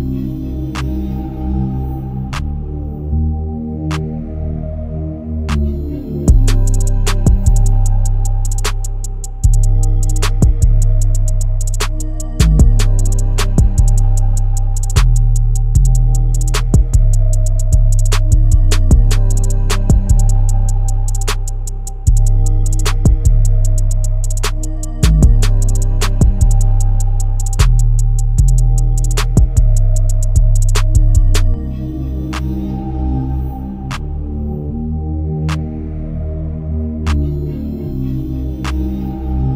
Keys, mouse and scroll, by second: 0.6 Tab, 1.1-5.1 middle drag.